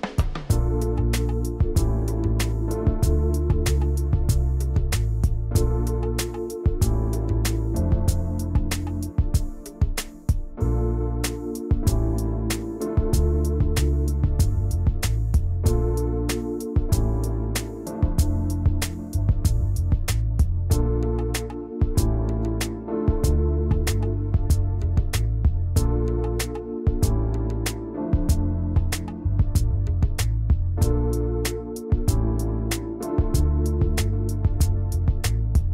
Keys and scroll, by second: 19.9 ctrl+shift+[, 20.0 ctrl+].